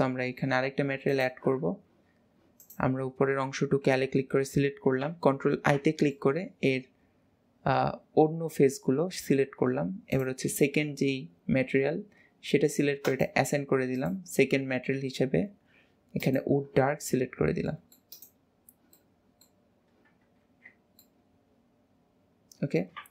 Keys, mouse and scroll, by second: 1.2 click, 1.7 Tab, 2.2-2.7 scroll up 1, 2.7 click, 6.2 middle click, 6.8-10.2 middle drag, 10.2 click, 13.1-17.1 drag, 17.7 middle click, 18.2 click, 19.3 middle click, 19.9 scroll down 2, 20.5 ctrl+s, 20.9 scroll up 2, 21.1 middle click, 21.6 middle click.